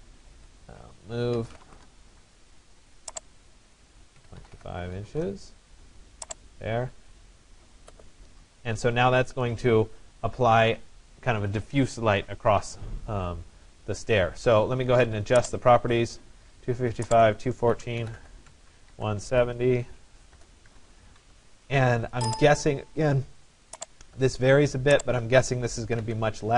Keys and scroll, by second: 0.4 Escape, 1.9 Return, 4.3 Delete, 4.3-5.2 typing, 5.2 Return, 17.3-19.4 typing, 20.4 BackSpace, 20.8 0, 21.2 Tab, 25.7 5.